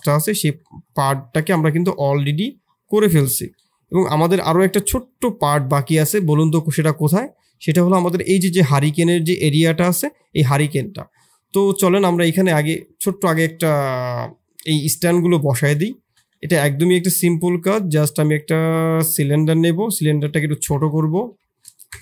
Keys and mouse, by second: 0.1 shift+click, 0.8 click, 1.3 s, 2.5 middle drag, 3.1 shift+middle click, 4.8 click, 5.6 middle click, 11.6 middle click, 13.3 middle click, 15.8 shift+click, 16.9 shift+a, 19.7 s, 21.1 r.